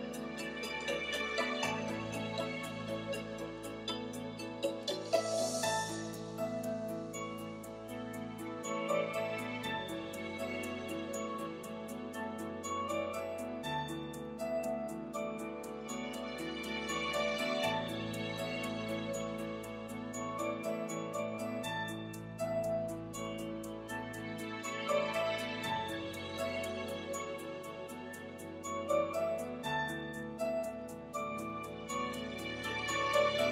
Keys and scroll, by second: 0.2 ., 0.6 4, 0.9 Return, 5.4-6.5 typing.